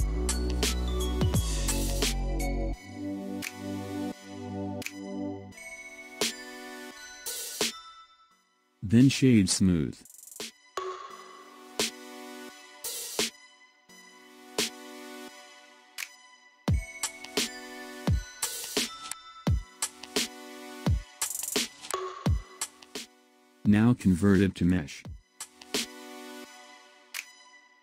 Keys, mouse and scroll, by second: 2.5-5.5 drag, 9.1 right click, 10.5-13.6 middle drag, 16.1 KP_1, 17.5 click, 18.7-19.3 scroll down 2, 19.3-20.5 scroll down 7, 20.5 scroll up 4, 21.6 scroll down 2, 23.3 click, 25.0-27.8 drag.